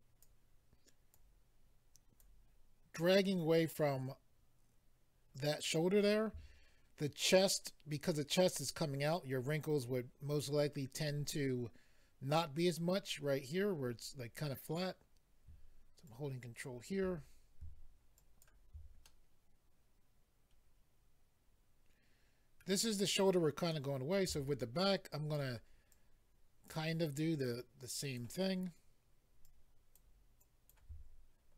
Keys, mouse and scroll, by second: 1.1 ctrl+click, 16.1 ctrl+click, 18.2 ctrl+click, 19.0 middle click, 23.7 middle click, 24.8 ctrl+click, 25.9 ctrl+click, 27.4 ctrl+click, 29.4 ctrl+click, 30.4 ctrl+click.